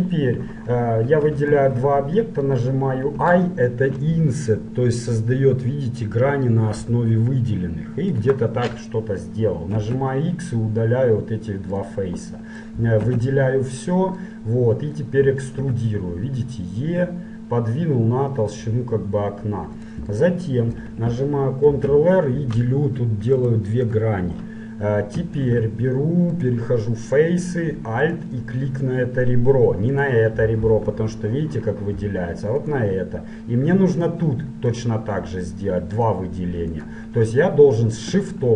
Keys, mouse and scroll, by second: 1.4-3.4 right drag, 3.0 i, 9.8 x, 12.4 middle click, 13.2 a, 14.0 middle click, 14.5-16.2 middle drag, 15.6 e, 20.3-22.0 middle drag, 21.8 ctrl+r, 24.7-28.0 middle drag, 25.5 ctrl+Tab, 28.0-32.0 right drag, 32.6-38.5 right drag.